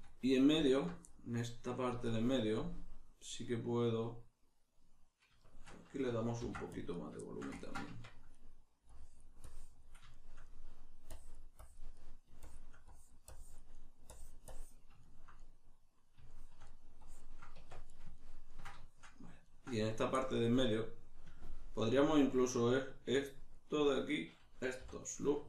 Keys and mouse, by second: 0.6 alt+right click, 1.0-7.0 middle drag, 6.4 ctrl+r, 7.0 right click, 7.2-8.9 shift+middle drag, 7.9 Tab, 8.9-10.1 drag, 10.1-11.1 shift+middle drag, 11.1 click, 11.9 middle click, 12.4-13.7 shift+drag, 13.7 middle click, 14.1 click, 15.0-17.0 ctrl+middle drag, 17.0 click, 17.5 Tab, 17.9-23.5 ctrl+middle drag, 23.5 right click, 24.8 3, 25.1 right click.